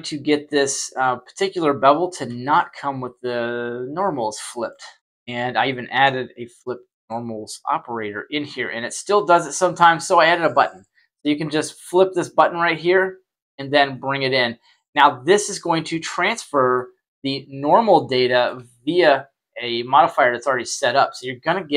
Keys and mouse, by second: 0.9-2.2 drag, 2.5-4.6 middle drag, 5.6 shift+middle drag, 6.3 middle click, 10.8 click, 12.5-13.6 drag, 13.9-15.0 middle drag, 17.0 right click, 18.1-18.4 shift+middle drag, 21.5 click.